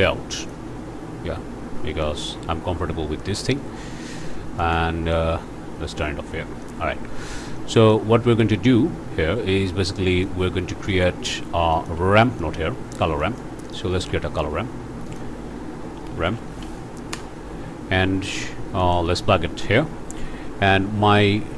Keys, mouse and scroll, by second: 0.4 click, 1.1 scroll down 1, 1.6 scroll up 1, 2.0 click, 4.6 click, 5.1-6.2 drag, 6.2 scroll up 1, 6.6 click, 7.6 click, 8.5 scroll down 1, 10.2 click, 11.7 shift+scroll up 1, 11.9 shift+click, 12.2 shift+click, 12.9 shift+scroll up 2, 13.2 click, 13.6 shift+click, 13.9 shift+a, 15.1 click, 15.9 r, 16.1 a, 16.2 m, 16.3 p, 17.1 Return, 18.8 click.